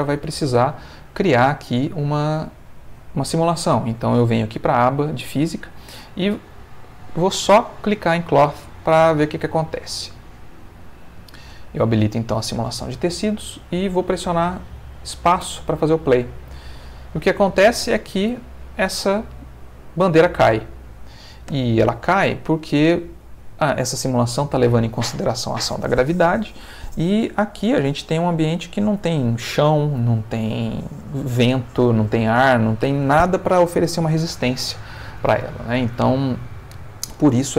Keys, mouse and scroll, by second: 0.0 click, 2.4 click, 7.8 click, 11.0 click, 15.4 space, 17.9 Escape, 18.1-19.2 middle drag, 19.2 space, 21.5 Escape, 22.3-23.9 middle drag.